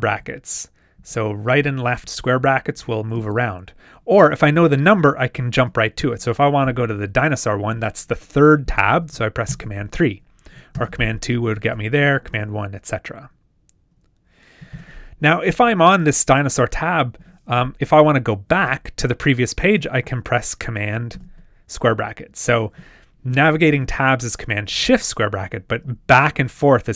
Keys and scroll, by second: 1.0 shift+super+], 1.4 shift+super+[, 1.8 shift+super+], 2.4 shift+super+[, 9.5 super+3, 10.7 super+2, 12.2 super+1, 14.7 super+3, 21.1 super+[.